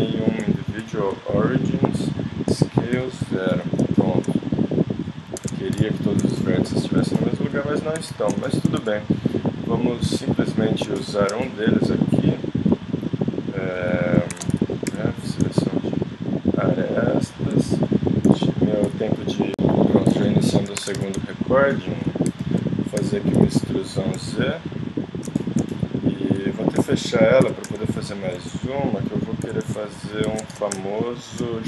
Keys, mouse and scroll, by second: 0.8 ctrl+., 2.5 s, 5.4 ctrl+Tab, 8.0 KP_1, 8.2 click, 8.8 z, 13.0 right click, 14.3 ctrl+Tab, 14.9 z, 15.7 ctrl+click, 18.2 x, 20.8 ctrl+Tab, 21.3-23.0 drag, 23.0 z, 23.3 e, 26.8 f, 27.4 e, 29.1-30.2 drag, 29.4 z, 30.3 ctrl+Tab.